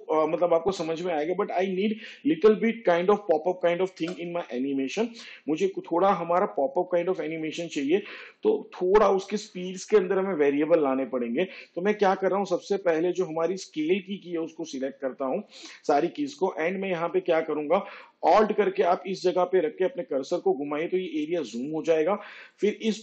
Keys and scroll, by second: 0.3 space, 6.2 space.